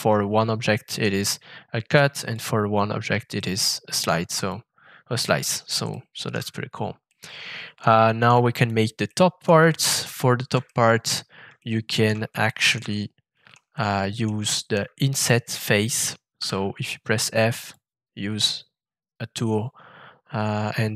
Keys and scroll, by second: 16.3 shift+f.